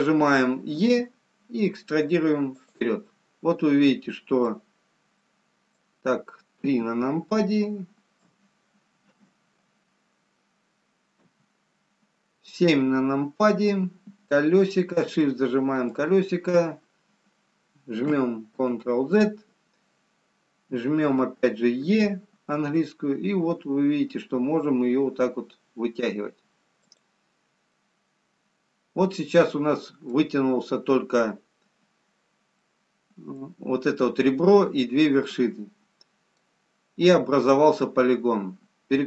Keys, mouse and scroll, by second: 3.3 middle click, 3.3 e, 5.9 middle click, 5.9-6.7 scroll down 3, 7.1 KP_3, 8.2 KP_5, 9.3 KP_4, 9.3 KP_2, 10.2 KP_1, 11.3 KP_7, 13.2 scroll up 1, 14.2 scroll up 4, 15.6 shift+middle click, 18.8 ctrl+z, 28.2 middle click, 32.7 middle click, 35.6 middle click.